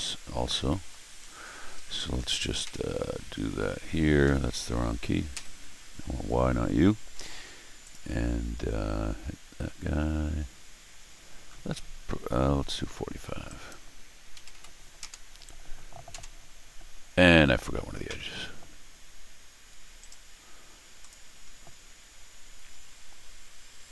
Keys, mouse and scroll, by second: 0.0 middle click, 0.7 middle click, 1.2 middle click, 1.7 Escape, 1.9 Escape, 2.6 u, 4.2 Escape, 5.3 y, 7.8 click, 13.4 click, 14.1-15.0 typing, 19.5 Escape, 20.0 right click, 21.0 click, 21.5 click, 21.9 click, 22.3 click, 22.7 click.